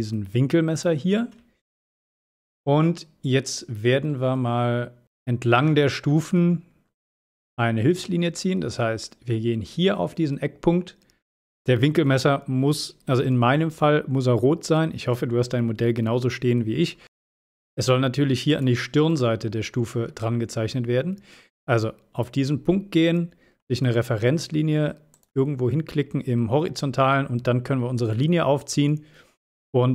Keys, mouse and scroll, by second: 0.7 click, 1.7-2.9 middle drag, 3.3-5.0 scroll up 1, 5.9-7.9 scroll up 1, 8.4-8.7 scroll up 1, 18.6 click, 25.2 click.